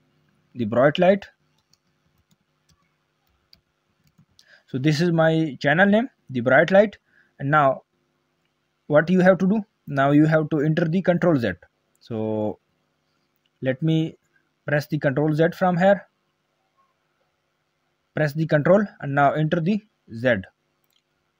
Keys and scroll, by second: 20.8 ctrl+z, 21.0 a.